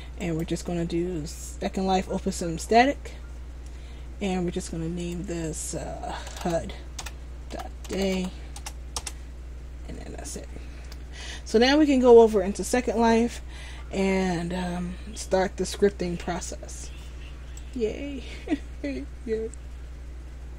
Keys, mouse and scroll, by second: 9.5 Return.